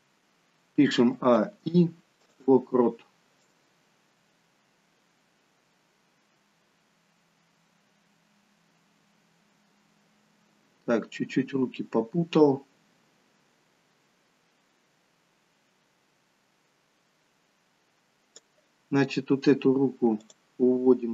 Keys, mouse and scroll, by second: 0.9 a, 1.4 i, 3.5 click, 19.0-20.0 scroll up 2, 20.0 scroll up 1, 20.2 click.